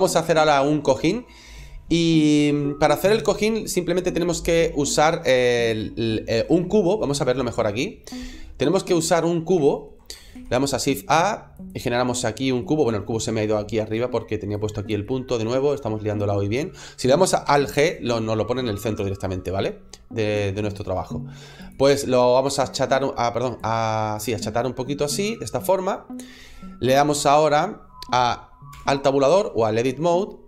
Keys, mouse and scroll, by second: 9.1 middle click, 9.5 shift+middle click, 10.2 shift+a, 12.5 middle click, 13.0 middle click, 13.1 middle click, 13.2 scroll up 1, 13.5-14.4 scroll down 1, 14.4 click, 14.9 middle click, 16.1 click, 17.7 alt+g, 18.8 click, 19.5 middle click, 20.2 click, 21.5 click, 26.2 click, 26.2 middle click, 26.7 middle click, 27.3-28.6 scroll up 1, 28.6 Tab, 29.4 shift+middle click, 30.1 scroll up 2.